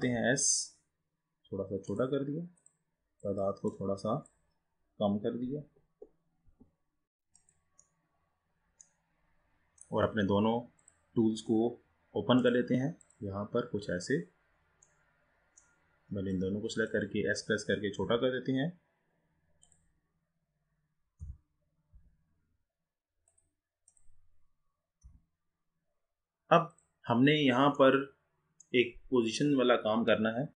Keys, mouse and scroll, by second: 0.2 s, 2.7-5.8 drag, 7.4 drag, 7.9-10.9 middle drag, 10.9-12.5 drag, 13.1 click, 14.0-14.9 scroll down 3, 14.9-16.4 middle drag, 16.4 click, 18.1 s, 21.3 g, 24.0 click, 25.2 g, 28.1-29.2 middle drag, 29.2-30.3 scroll up 4, 30.3-30.5 scroll up 2.